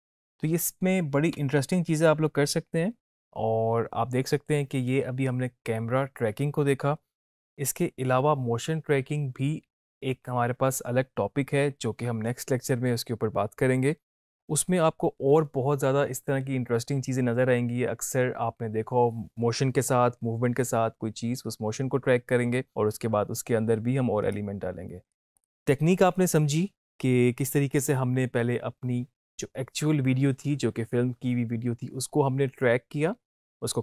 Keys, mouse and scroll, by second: 1.5 space, 14.6 space, 24.4-25.1 click.